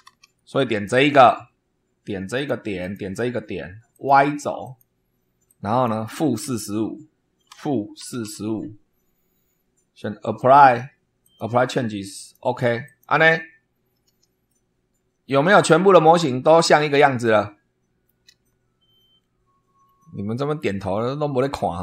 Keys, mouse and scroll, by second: 0.0 super+2, 0.9 click, 2.3 click, 2.7 click, 3.8 click, 4.6 click, 5.4 click, 7.2-8.7 typing, 10.3 click, 11.2 click, 12.1 click, 12.8 click, 13.5 scroll up 2, 14.4-18.2 shift+middle drag, 19.7 scroll down 2, 20.5 scroll up 2, 21.2 scroll up 2.